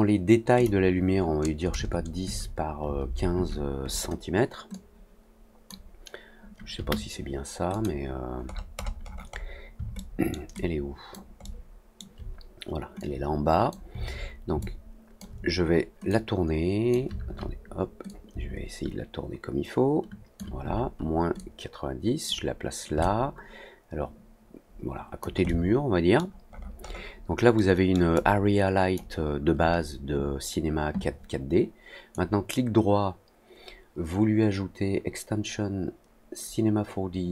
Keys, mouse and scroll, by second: 0.5 click, 4.6 click, 7.6 click, 8.4-8.9 scroll down 2, 8.9 scroll up 1, 9.0-9.5 scroll down 2, 9.9 alt+middle click, 10.5 alt+click, 11.4 alt+middle click, 12.9 click, 14.5 alt+click, 16.0 click, 18.0-25.1 shift+drag, 25.4 alt+middle click, 26.4-27.0 alt+scroll up 2, 27.5 alt+middle click, 28.1 alt+click, 32.1-37.3 right drag.